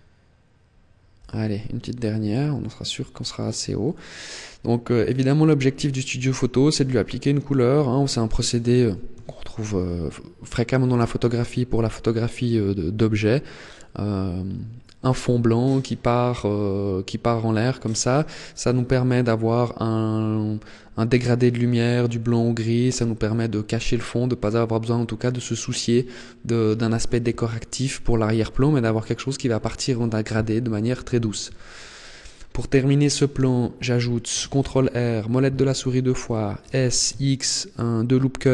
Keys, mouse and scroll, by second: 1.0 e, 3.4 click, 3.6 middle click, 7.9-8.3 scroll down 2, 8.3-9.0 scroll up 6, 9.0 shift+middle click, 9.9-10.2 scroll down 2, 31.3-32.0 scroll down 3, 32.0 middle click, 33.3 shift+middle click, 34.4 ctrl+r, 36.0 click, 36.6 s.